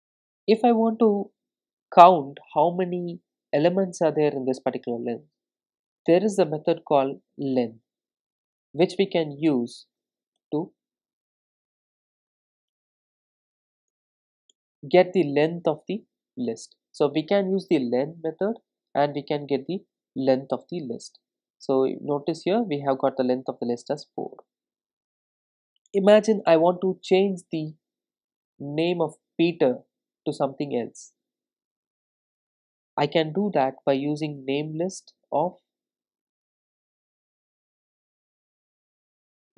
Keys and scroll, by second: 7.9 Return, 19.2 Return, 20.7 ctrl+r, 34.4 Return.